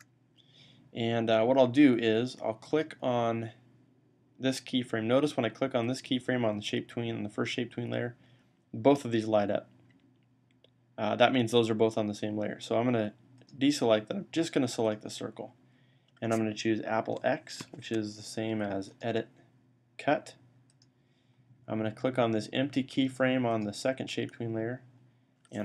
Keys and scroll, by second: 17.5 x.